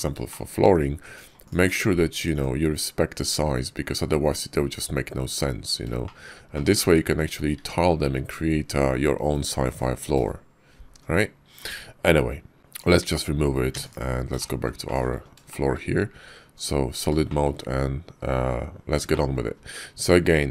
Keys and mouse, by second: 0.1 shift+click, 1.3 click, 1.5 click, 2.0 click, 2.2 click, 4.6 middle click, 5.9-7.2 shift+middle drag, 12.6 b, 13.6 x, 14.2 shift+click, 14.7 shift+click, 15.4 shift+click, 16.4 click, 17.1 shift+click, 18.9 middle click, 20.0 Tab.